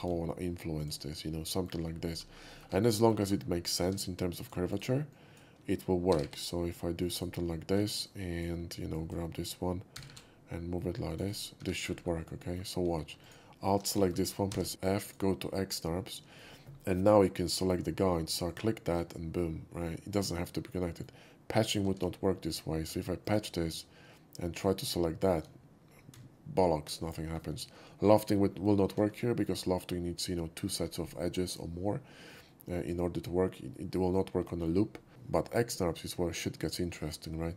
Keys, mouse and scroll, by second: 0.8 click, 1.2-1.6 middle drag, 1.8-2.2 scroll up 3, 2.5 ctrl+middle click, 2.7 alt+middle click, 3.0 alt+middle click, 3.2 scroll up 2, 3.8 1, 4.0-4.5 drag, 4.7 right click, 5.1 click, 6.1 g, 6.2 g, 7.0 click, 8.0-8.4 drag, 8.0 1, 8.9 click, 9.9 g, 10.1 g, 11.1 click, 11.6 2, 12.0 middle click, 12.3 middle drag, 13.2 alt+click, 14.0 shift+middle click, 14.2 scroll up 1, 14.5 f, 15.0 click, 15.6 scroll up 1, 16.1 middle click, 18.5 shift+click, 19.8-21.0 shift+middle drag, 21.9 ctrl+z, 23.2 click, 24.7 shift+click, 28.9 ctrl+z, 29.3 middle click, 32.5-32.9 middle drag, 34.5 shift+middle click.